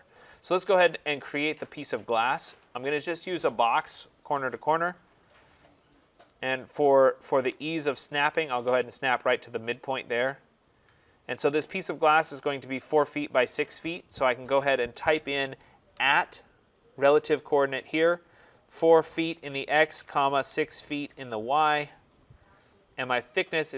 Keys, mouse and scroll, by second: 4.8 click, 5.9-7.6 scroll, 7.6-9.8 scroll, 10.1 click, 11.7 scroll, 15.8 @, 18.6-21.5 typing, 22.6-23.4 typing, 22.7 scroll.